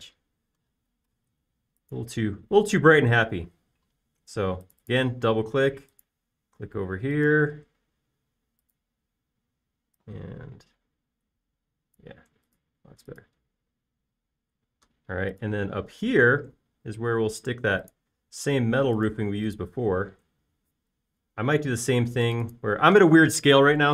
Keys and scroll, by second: 14.1 space, 21.4 space.